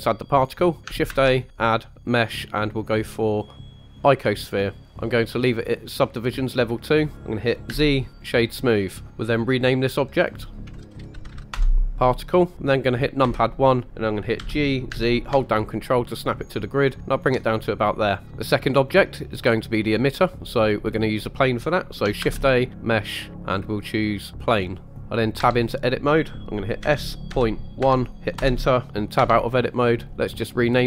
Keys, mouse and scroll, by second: 1.1 shift+a, 4.8 click, 6.8 click, 7.6 z, 10.1 click, 10.3-11.5 drag, 13.2 KP_1, 14.4 g, 14.9 z, 17.1 ctrl+click, 18.2 middle click, 22.2 shift+a, 25.0-25.4 scroll up 1, 25.4 Tab, 26.8 s, 27.3 ., 27.8 1, 28.3 Return, 29.2 Tab, 30.7 click.